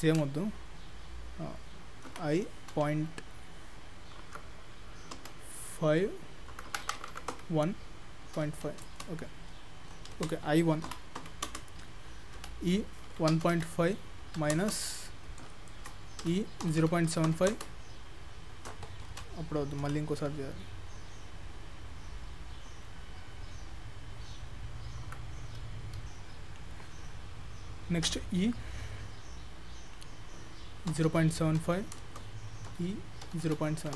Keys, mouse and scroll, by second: 0.0 ctrl+z, 2.2 i, 10.2 ctrl+z, 10.9 i, 12.5 e, 15.3-15.7 scroll up 3, 15.7 shift+middle click, 16.3 e, 19.1 ctrl+z, 19.9 i, 28.1 e, 32.8 e.